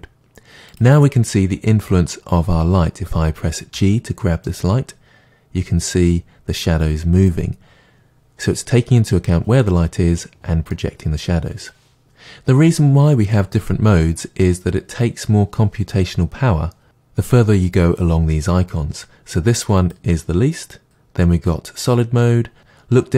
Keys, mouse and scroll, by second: 3.8 g, 8.9 click, 10.7-19.8 middle drag, 19.8-22.6 drag.